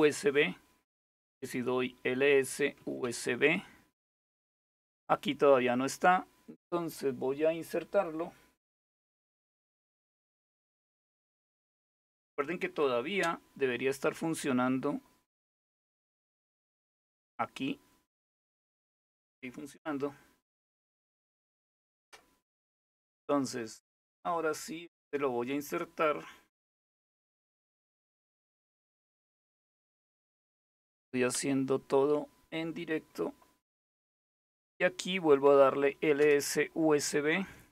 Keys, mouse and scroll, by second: 0.5-3.1 typing, 15.2 click, 16.3 click, 33.8 click, 35.3 Up, 35.8 Return.